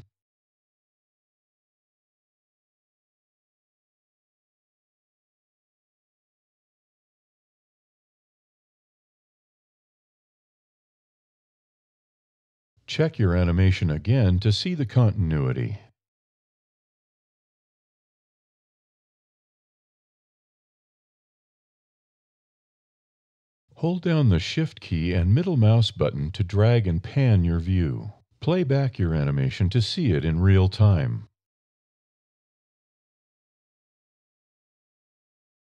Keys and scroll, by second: 0.8 e, 10.2 alt+e, 11.1 e.